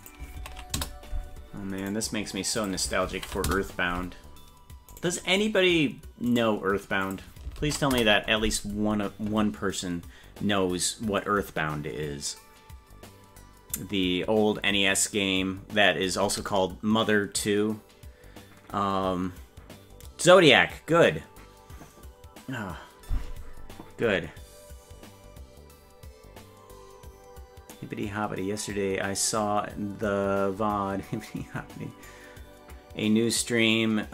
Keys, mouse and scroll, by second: 0.0-1.1 drag, 1.8 right click, 2.6-3.8 drag, 4.9 right click, 6.4 right click, 7.0-8.2 drag.